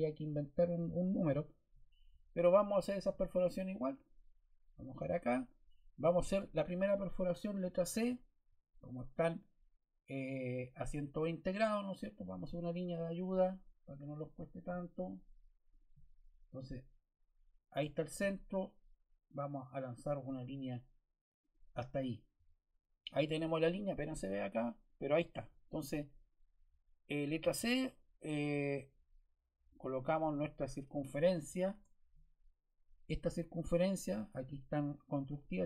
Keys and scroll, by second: 7.8 c, 31.6 Escape.